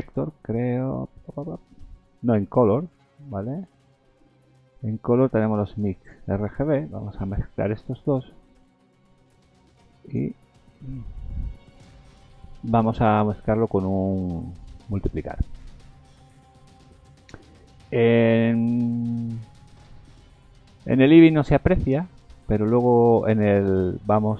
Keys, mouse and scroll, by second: 7.5-8.2 scroll up 6, 9.0 click, 9.0-9.5 scroll up 1, 13.5 click, 16.3 scroll down 2, 16.7 scroll up 2, 17.6 scroll down 1, 18.2-18.9 scroll up 2, 21.4 shift+middle click, 22.3-22.6 scroll up 2, 22.8 shift+middle click.